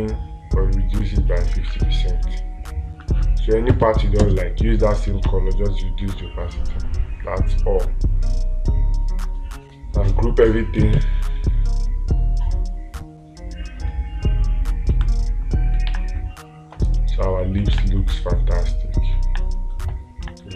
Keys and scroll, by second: 5.7 space, 16.4 space, 18.2 space.